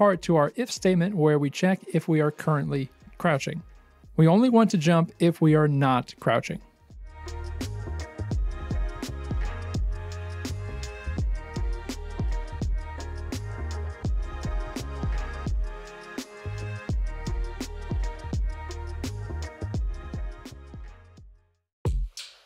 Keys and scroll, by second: 0.1 space, 0.9 ctrl+v, 9.2 space, 17.3 space, 17.5 c, 18.4 space, 18.7 c, 20.2 space, 21.5 w.